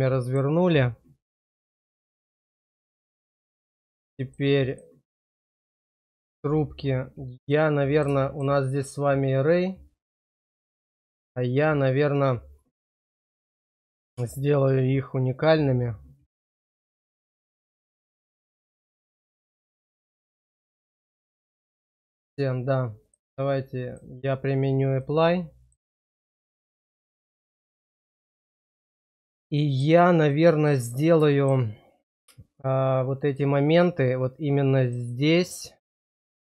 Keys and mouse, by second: 0.0 middle click, 2.7 click, 3.5 middle click, 4.2 shift+middle click, 4.6 click, 7.4 middle click, 10.6-22.0 middle drag, 23.0 click, 25.0 middle click, 26.4 shift+middle click, 26.7 click, 28.2 Tab, 28.2 middle click, 29.6 shift+middle click, 30.3 middle click, 31.2 shift+middle click, 33.2 click, 35.0 click, 36.4 shift+click.